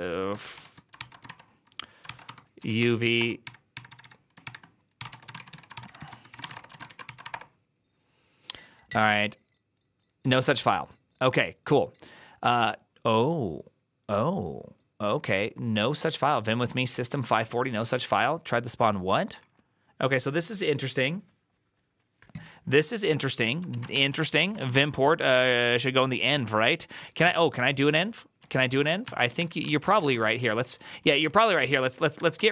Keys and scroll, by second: 0.0-7.6 typing, 0.8 ctrl+c, 23.6 ctrl+a, 23.8-25.0 typing, 24.1 ctrl+c, 24.2 ctrl+c, 27.1 ctrl+h, 28.3 ctrl+u, 28.9 ctrl+t, 29.3 ctrl+n, 29.5 ctrl+c, 29.5-32.5 typing.